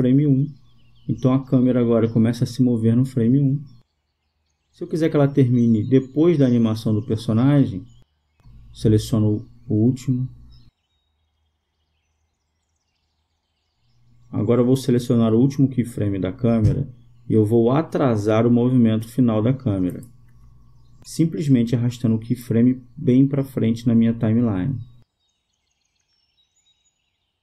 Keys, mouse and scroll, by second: 6.2 click, 7.0 right click, 10.4 click, 14.5 click, 20.6 right click, 21.5 g.